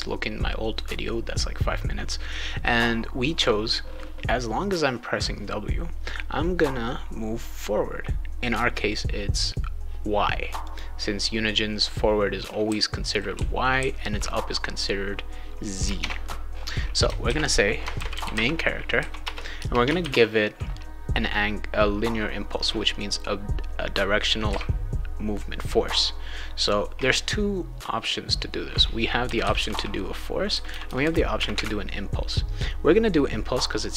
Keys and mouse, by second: 10.6 click, 11.9-14.3 right drag, 12.7 d, 13.3 e, 13.7 d, 16.0 alt+Tab, 17.3 ctrl+s, 17.7-20.0 typing, 19.2 Return, 24.5 a.